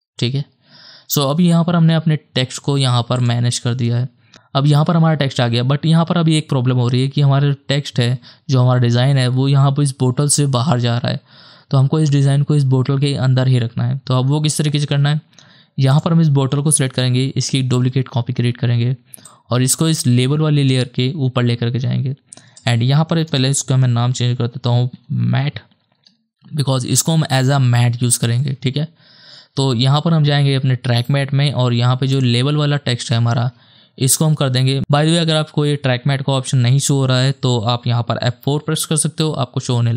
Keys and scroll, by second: 17.7 ctrl+d, 23.4 Return, 24.4-25.9 typing, 25.9 Return, 38.6 F4, 39.2 F4.